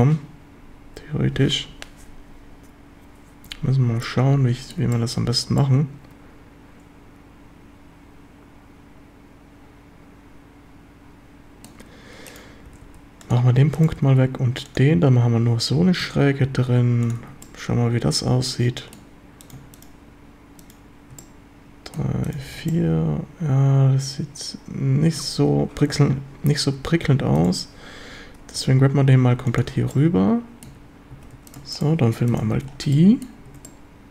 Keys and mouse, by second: 4.1-4.7 drag, 4.9 shift+middle drag, 5.6-11.7 middle drag, 12.7 g, 12.9 g, 13.9 g, 14.1 g, 14.7 drag, 16.0 a, 16.4 a, 16.7 q, 17.2 a, 17.4-18.4 middle drag, 18.4-19.0 drag, 21.2-22.3 middle drag, 22.3 shift+click, 22.4 shift+middle click, 22.4 f, 22.5 a, 22.7-25.0 middle drag, 25.0 ctrl+click, 25.0 ctrl+right click, 25.5 ctrl+z, 27.0 a, 28.6 g, 29.5 ctrl+click, 29.9-30.7 drag, 30.7 a, 31.1 a, 31.3 q, 32.6 f, 32.6 a, 33.0-33.3 drag, 33.5 Tab, 33.6-34.1 middle drag.